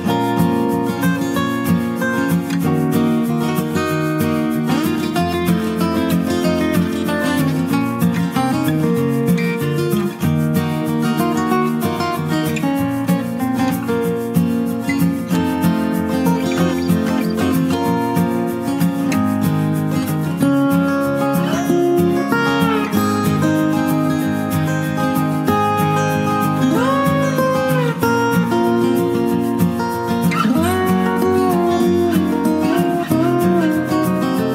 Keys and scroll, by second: 1.3 ctrl+t, 18.1-18.9 typing, 25.2 ctrl+t.